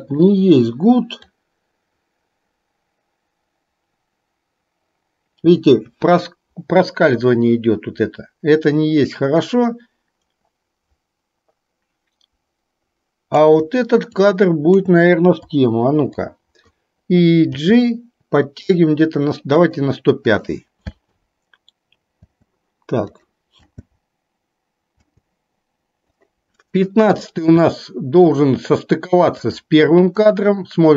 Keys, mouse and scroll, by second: 0.1-17.6 drag, 17.6 g, 21.1 space, 22.4 space, 23.3-23.8 drag, 23.8 space, 25.2 space, 26.2-27.7 drag, 27.8-28.3 shift+middle drag, 29.4-30.9 drag.